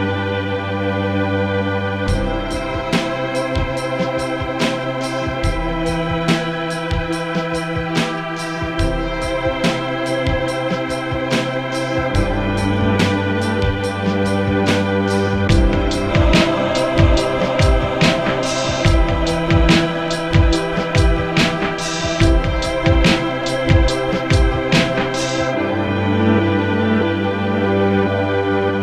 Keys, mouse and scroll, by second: 5.1 F9, 11.2 F9, 13.3 F9, 18.1 F9, 19.8 Tab, 22.6 click, 23.2 Tab, 27.8 a.